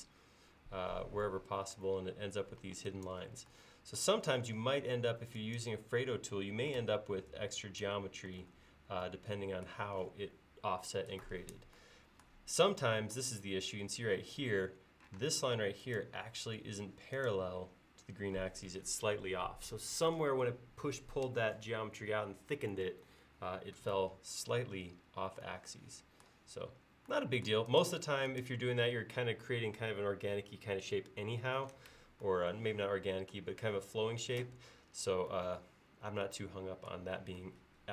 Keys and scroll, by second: 2.7 e, 6.8 super+z, 8.5 super+z, 15.2 space.